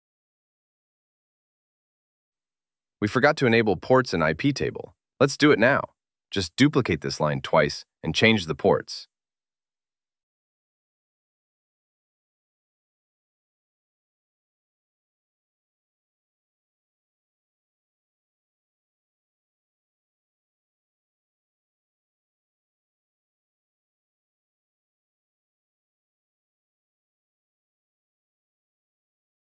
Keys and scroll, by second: 3.6 super+v, 5.2 Down, 11.7 super+c, 13.2 Right, 13.8 Right, 14.0 End, 16.1 super+v, 17.4 super+v, 18.2 Left, 20.0 Up, 20.5 BackSpace, 21.8 Down, 22.3 BackSpace, 24.9 ctrl+x.